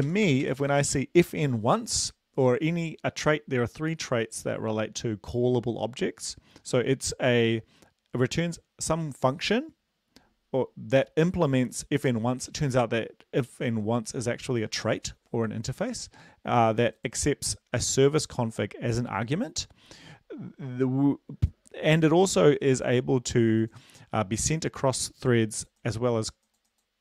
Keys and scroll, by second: 0.4 shift+Right.